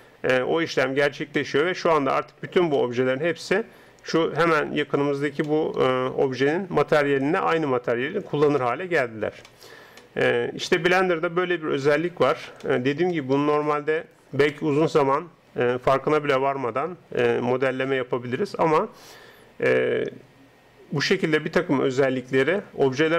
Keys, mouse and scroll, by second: 13.1-14.8 middle drag, 17.2-23.1 middle drag.